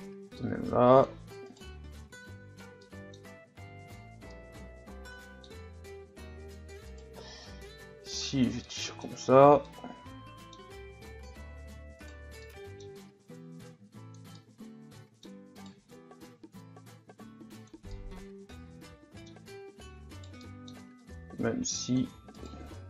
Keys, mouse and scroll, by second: 1.5 right click, 2.0 click, 2.8 middle click, 3.2 scroll up 1, 3.5 Tab, 3.9-4.3 scroll down 1, 4.3-5.7 middle drag, 5.7 scroll up 2, 6.2 Tab, 6.9 right click, 7.4-8.6 drag, 8.6 middle click, 9.2 Tab, 9.7-10.6 middle drag, 10.6-11.3 scroll up 2, 11.3 Tab, 12.1 right click, 12.5-13.7 middle drag, 13.7 click, 14.4-15.5 middle drag, 15.5 right click, 16.6-17.9 drag, 17.9-20.2 middle drag, 20.2 right click, 20.4 middle click, 21.1-22.3 drag, 22.3 right click.